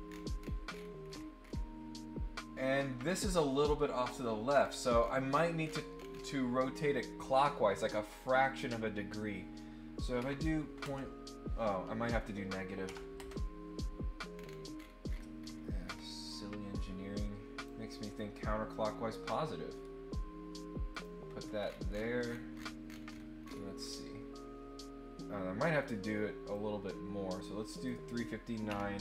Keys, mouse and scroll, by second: 0.7-1.5 scroll up 6, 4.5-6.0 scroll down 6, 6.1 scroll up 1, 7.7 click, 14.3 scroll down 1, 14.7-16.0 scroll up 8, 16.3-17.6 drag, 18.1 click, 18.6 click, 20.9 click, 21.4 scroll up 2, 21.8-22.9 scroll down 4, 23.0-23.8 scroll up 3, 26.5-27.8 drag.